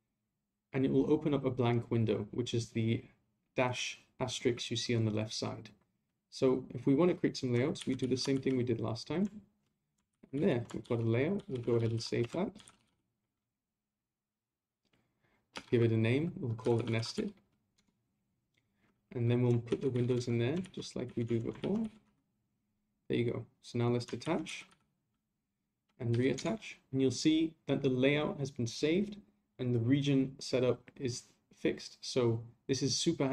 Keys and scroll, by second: 7.8 a, 10.1 ctrl+a, 24.2 ctrl+a.